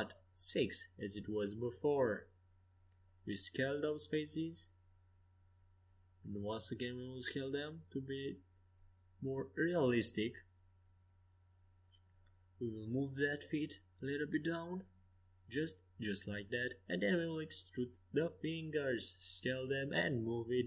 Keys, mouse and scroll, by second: 1.4-3.0 right drag, 3.0-4.7 middle drag, 3.5 s, 5.2 s, 11.0-13.8 middle drag, 13.8-15.5 drag, 15.2 middle click, 17.7 e, 18.9 s.